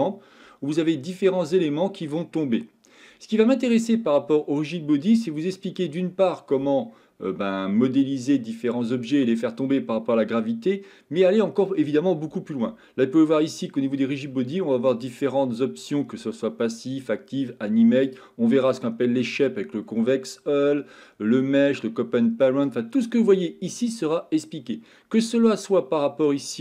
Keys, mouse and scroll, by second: 15.0-15.7 drag, 15.8 click, 18.1-22.9 drag.